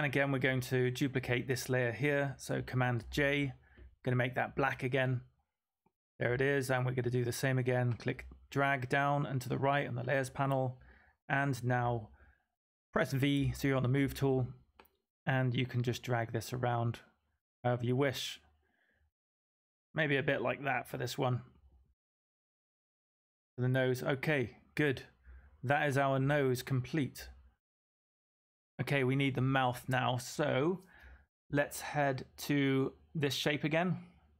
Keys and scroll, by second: 0.0-0.1 typing, 2.9 super+j, 13.3 v.